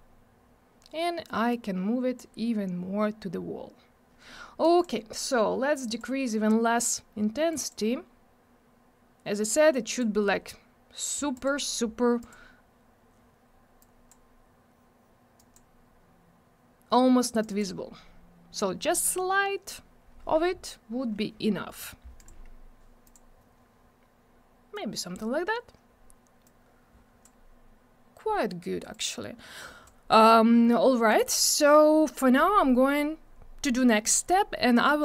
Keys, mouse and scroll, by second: 1.5 click, 4.6 click, 5.7 click, 7.5 click, 9.7 click, 11.3 click, 12.2 click, 13.8 click, 15.3 click, 17.4 click, 22.1 click, 23.0 click, 24.7 click, 26.4 click, 28.9 click, 31.1 click.